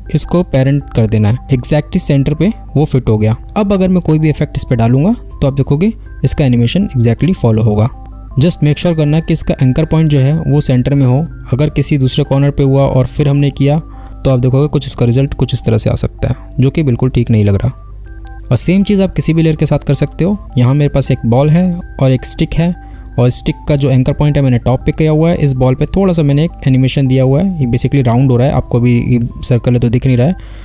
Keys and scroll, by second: 6.0 space, 26.2 space.